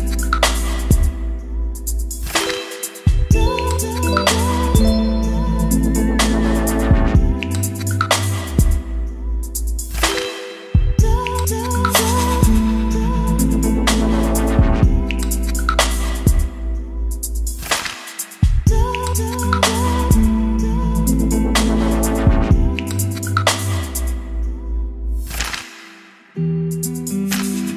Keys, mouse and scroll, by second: 0.0-2.2 typing, 0.6 Return, 2.8 Return, 3.2-4.1 typing, 4.4 ctrl+s, 4.8 ctrl+r, 6.2-24.1 drag, 24.3-26.7 typing.